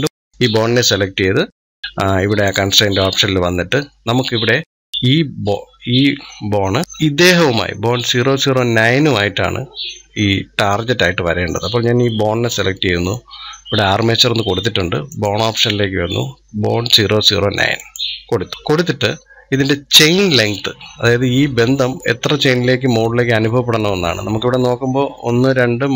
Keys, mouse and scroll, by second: 0.1-1.5 drag, 2.2 click, 14.9-21.6 drag, 22.8 scroll down 2, 23.8 scroll down 3.